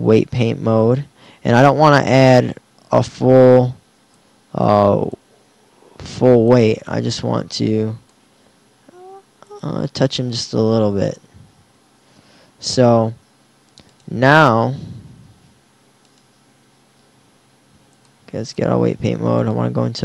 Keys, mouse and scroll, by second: 4.2-8.7 drag.